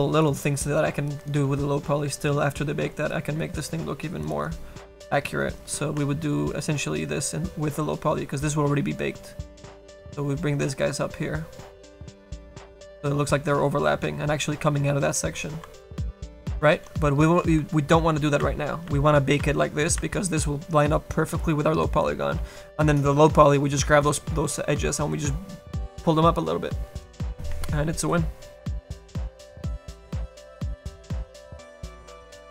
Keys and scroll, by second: 18.5 ctrl+z, 18.9 ctrl+z, 19.5 ctrl+z, 20.0 ctrl+z.